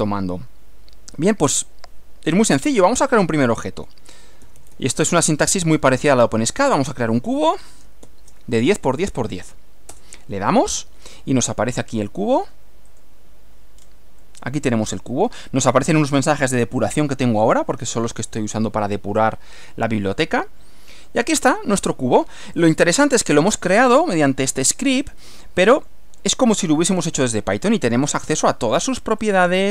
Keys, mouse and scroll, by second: 3.6-8.6 typing, 10.0 Return, 11.8 click, 12.9 click, 13.8 scroll down 2, 14.2-15.5 middle drag, 20.2-21.2 middle drag, 22.8 middle click, 25.2 middle click, 26.3-27.6 middle drag, 28.1 click, 29.2 click.